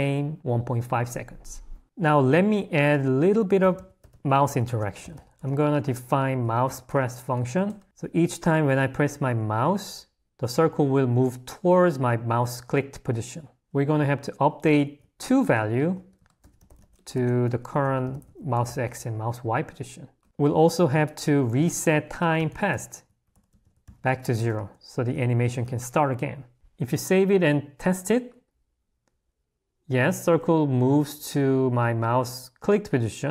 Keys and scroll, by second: 2.5 0, 20.2 Escape, 21.7 o.